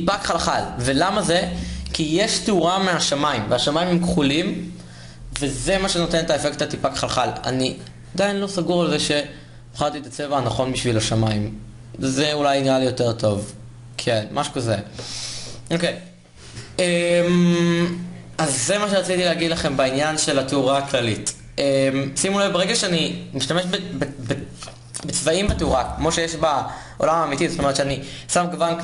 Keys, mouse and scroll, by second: 9.1-28.8 drag.